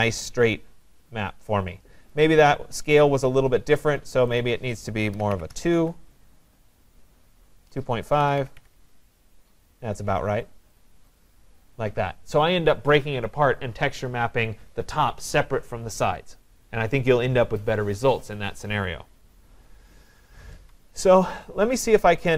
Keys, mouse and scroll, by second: 2.1 right click, 3.0 click, 4.5 click, 4.9-9.1 typing, 5.2 right click, 10.8 click, 12.3 right click.